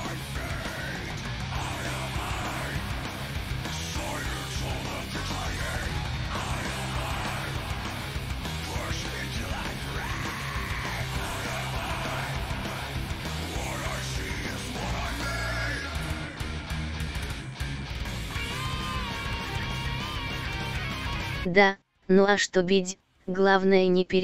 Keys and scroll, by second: 18.9 ctrl+z.